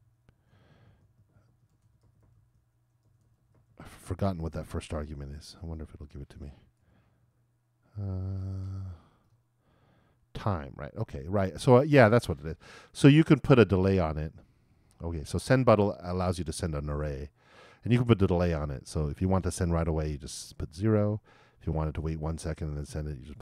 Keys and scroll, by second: 2.7-4.9 typing.